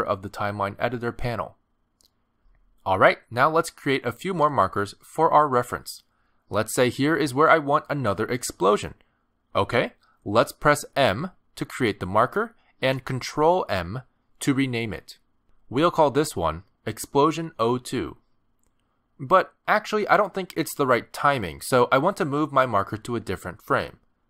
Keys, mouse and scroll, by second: 0.6 click, 2.3 click, 6.0 click, 7.6 click, 11.7 m, 14.1 ctrl+m, 19.3 Return, 21.2 middle click.